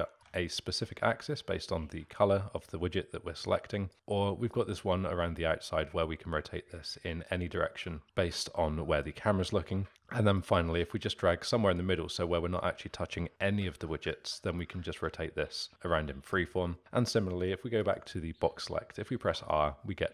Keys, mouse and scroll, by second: 0.8-9.3 drag, 10.3-13.3 drag, 14.1-16.7 drag, 17.8 click, 19.2 r.